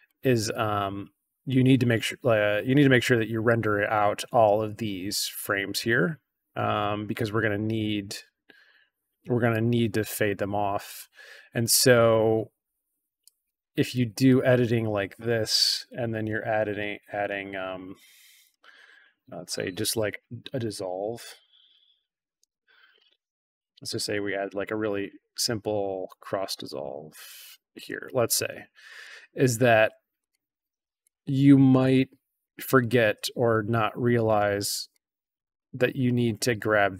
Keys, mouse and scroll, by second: 0.4-3.4 drag, 6.7-7.3 drag, 9.4-10.8 drag, 13.2 click, 14.2-14.6 drag, 18.9 click, 20.1-22.3 typing, 24.1-27.7 drag, 29.0 click, 30.2-30.9 drag, 31.7-32.4 drag, 33.4 click, 34.8-35.3 drag.